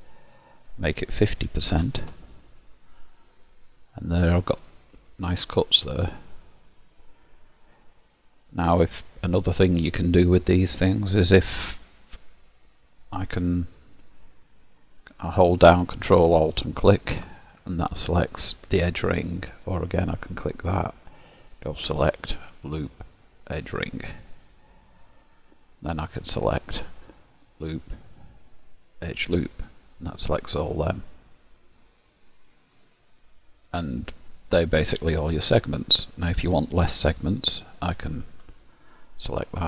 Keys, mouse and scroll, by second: 0.4 click, 3.3 middle click, 6.2-7.1 scroll up 2, 7.1 click, 8.3-8.9 scroll down 1, 8.9 middle click, 8.9 scroll down 1, 16.6 ctrl+alt+click, 19.6 click, 21.5 click, 26.4 click, 30.1 middle click, 38.7 click.